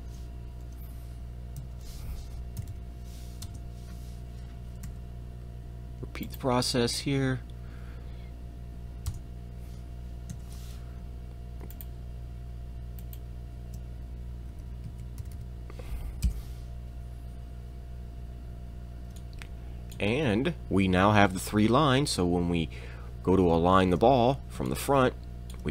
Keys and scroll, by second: 1.6 KP_8, 2.6 m, 3.4 Return, 4.8 r, 9.1 Return, 10.3 e, 15.2 m.